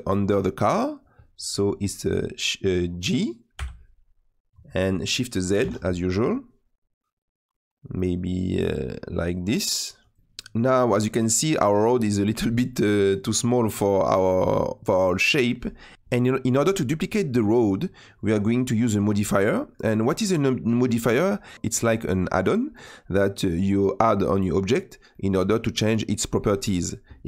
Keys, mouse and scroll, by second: 3.6 g, 10.2-15.8 middle drag, 15.8 scroll down 2, 15.9-27.2 middle drag.